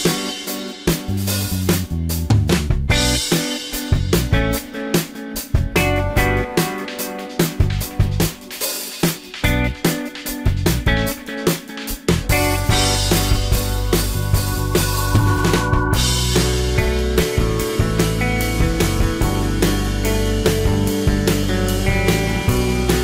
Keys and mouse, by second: 1.9-2.7 drag, 2.7-4.4 middle drag, 4.4-4.7 drag, 4.7-5.0 middle drag, 6.3 middle click, 6.4-7.7 drag, 9.4 s, 10.7 y, 14.7-16.4 middle drag, 16.6-17.6 drag, 17.6 middle click, 17.7-18.4 drag, 18.4-19.2 middle drag, 19.2 drag, 19.4 middle drag, 19.6 click, 19.7-21.1 drag, 21.1-22.6 middle drag, 22.6 drag, 22.8-23.0 middle drag.